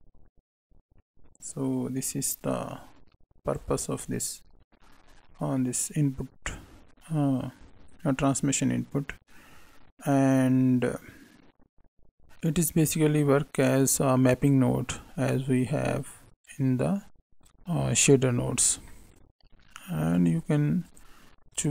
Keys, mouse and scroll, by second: 5.5 middle click, 12.7 click, 16.0 right click, 16.8 right click, 18.0 middle click, 18.8 scroll up 1, 18.8 middle click, 20.1 click, 21.5 click.